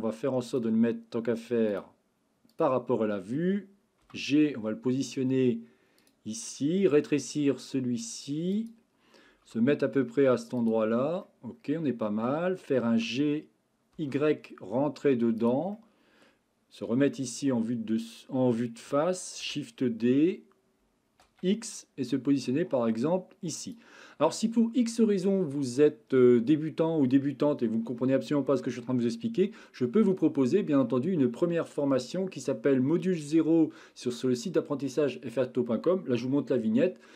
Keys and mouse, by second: 1.8-2.6 drag, 4.0 g, 6.9 s, 8.5 click, 9.5 g, 11.2-12.3 middle drag, 12.9 g, 13.9 y, 15.4 click, 15.7-16.3 middle drag, 16.9 KP_1, 19.4 shift+d, 21.2 x.